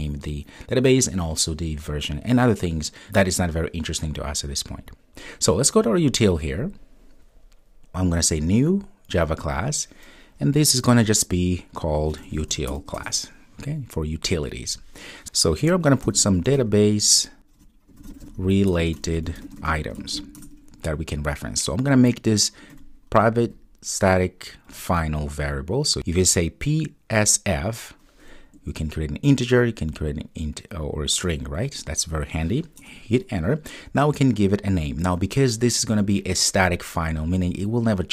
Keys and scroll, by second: 32.8 Return.